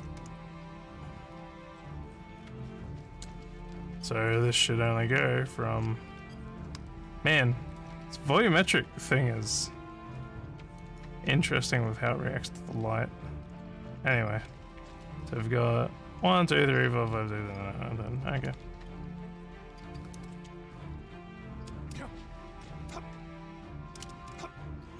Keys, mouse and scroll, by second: 0.0-1.4 typing, 3.4 s, 4.0 w, 5.4 w, 6.1 s, 6.8 w, 7.8 s, 8.9 w, 9.6 s, 10.6 w, 11.2 s, 12.0 w, 12.8 s, 14.4 w, 15.1 w, 15.7 w, 19.2 w, 21.6 space, 22.5 space, 23.5 space, 24.0 space.